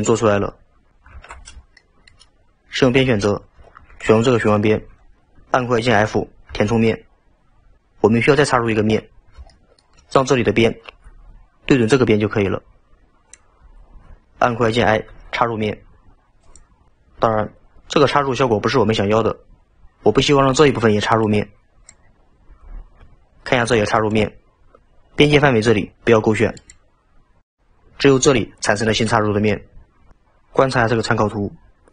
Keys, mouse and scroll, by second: 1.2 alt+z, 1.8-2.9 shift+middle drag, 2.9 2, 4.4 alt+click, 6.6 f, 9.1-9.6 scroll up 1, 9.6-13.7 middle drag, 24.1 click, 26.6 click.